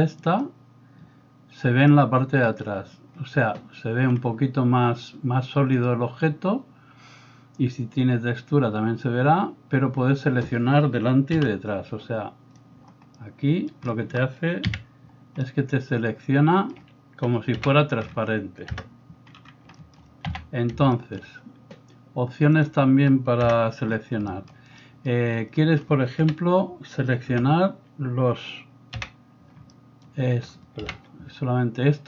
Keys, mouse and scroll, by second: 11.4 b, 13.2-17.7 middle drag, 14.7 KP_Decimal, 17.5 KP_1, 18.8 KP_0, 19.4-23.3 shift+middle drag, 20.3 a, 23.5 KP_0, 24.3 middle click, 26.2 KP_1, 27.3 KP_0, 29.0 KP_1, 30.9 KP_1.